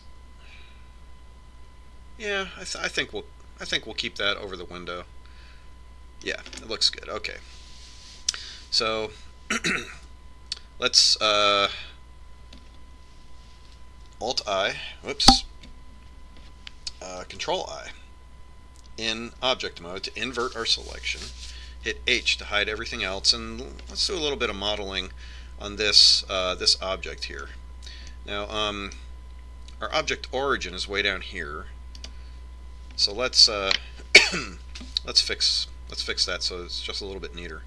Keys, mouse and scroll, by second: 0.9 scroll up 1, 1.4-3.2 middle drag, 8.0-10.1 middle drag, 11.5 Tab, 15.8 alt+i, 21.0 ctrl+i, 23.5 h, 25.5-27.3 middle drag, 29.0-31.7 middle drag, 33.6-35.3 right drag, 34.7-36.5 middle drag.